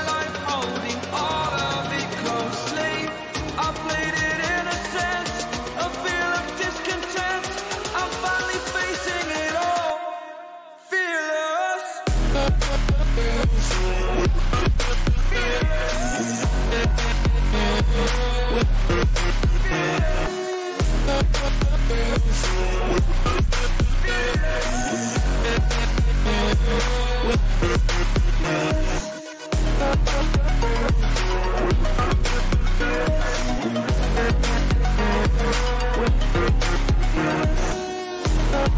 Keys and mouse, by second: 0.2 ctrl+j, 3.7 click, 7.6 click, 18.1 click, 23.7 click, 27.2-29.0 drag, 33.4 ctrl+c, 35.4 click.